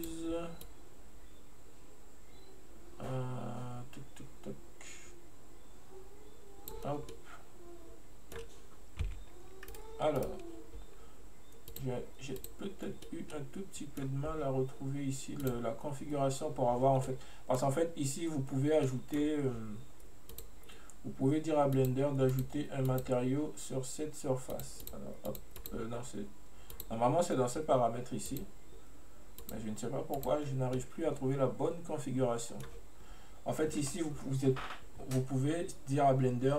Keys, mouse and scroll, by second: 7.2-9.1 middle drag, 9.1 s, 10.2 right click, 11.7-13.1 drag, 13.1-15.5 middle drag, 15.5 click, 17.1-17.9 middle drag, 17.9-18.9 scroll up 1, 18.9-20.4 middle drag, 20.4 click, 21.8 click, 22.4 click, 22.9 click, 24.6 click, 24.9 click, 25.3 click, 25.6 click, 26.8-30.8 drag, 30.8-33.8 middle drag.